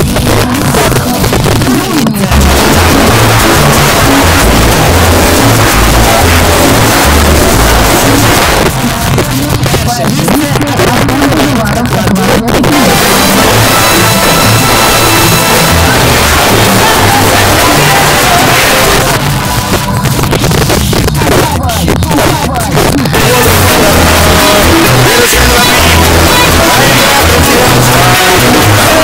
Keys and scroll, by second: 8.4 Page_Down, 18.8 Page_Down.